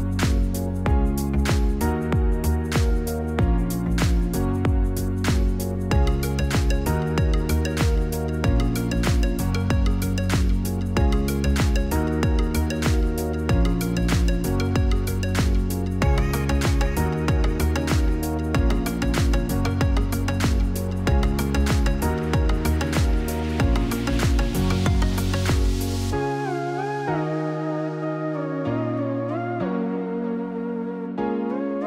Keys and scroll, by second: 0.4 0, 1.6 F9, 2.2 0, 7.6 0, 10.9-11.9 typing, 13.7 Return, 15.9-16.8 typing, 18.8 Return, 26.1-27.2 typing, 28.7 Return.